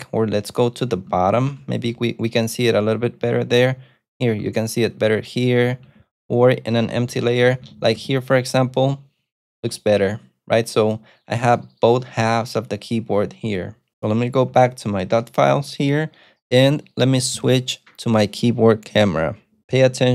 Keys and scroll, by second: 1.4 ctrl+d, 1.7 ctrl+d, 1.8 ctrl+d, 3.3 k, 3.5 k, 4.9 ctrl+d, 5.3 ctrl+d, 5.8 ctrl+d, 7.0-8.5 typing, 14.8 alt+super+F8.